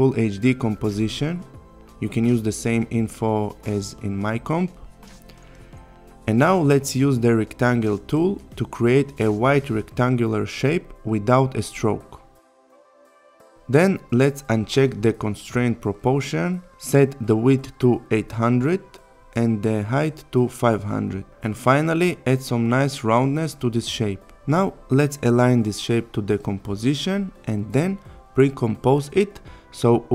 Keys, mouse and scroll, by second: 0.0-2.2 typing, 2.4 click, 3.8 click, 5.5 click, 7.4 click, 17.9 Return, 18.5 click, 20.1 Return, 21.2-22.4 click, 23.9 Return, 25.4 click.